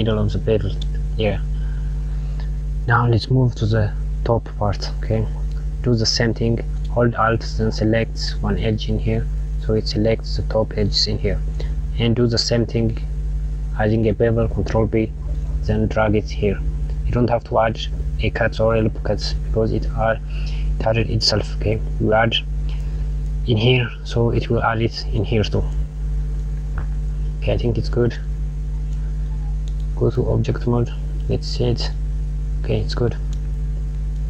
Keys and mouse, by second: 0.0 KP_Subtract, 1.3 click, 3.7 click, 5.4 click, 8.0 alt+click, 14.1 ctrl+b, 21.1 click, 25.8 click, 29.3 Tab, 30.2 click, 31.0 click, 32.3 middle click.